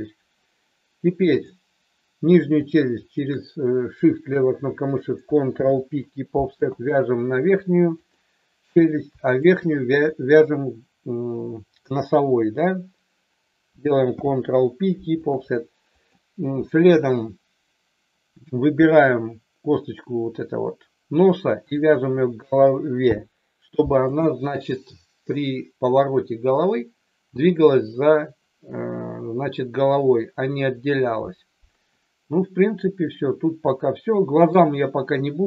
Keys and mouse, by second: 1.3 click, 3.0 shift+click, 5.4 ctrl+p, 14.0 ctrl+p, 23.0 ctrl+p, 33.7 shift+middle click.